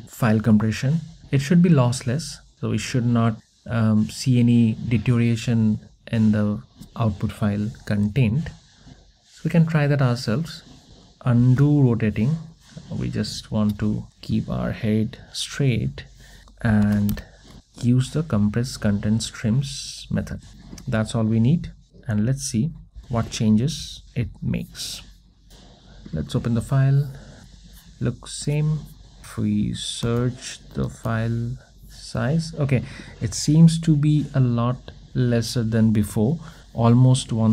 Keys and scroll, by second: 11.5 super+x, 19.1 Return.